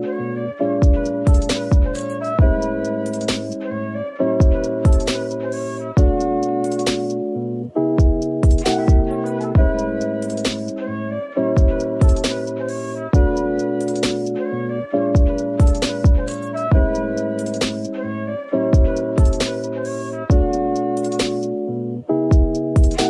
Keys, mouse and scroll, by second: 4.1 shift+click, 5.1 middle click, 6.4 right click, 10.5 middle click, 11.6 Tab, 11.9 middle click, 14.6 typing, 15.1 scroll down 1, 15.5 middle click, 16.1-19.8 typing, 20.8 middle click, 22.2 typing.